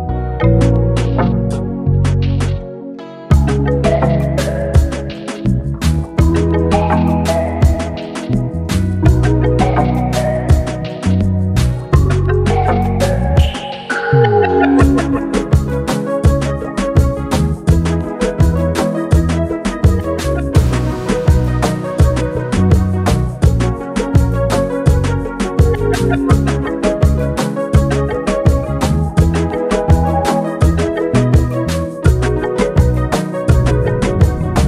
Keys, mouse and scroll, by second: 0.1-1.6 ctrl+drag, 3.2 click, 7.2 click, 8.7 shift+click, 11.0 click, 12.7 click, 17.0 click, 18.2-18.7 scroll down 1, 20.5-20.8 scroll up 1, 22.8 click, 24.0 click, 24.8 space, 26.1 click, 27.0 ctrl+z, 27.6 click, 29.9 shift+click, 33.8 space.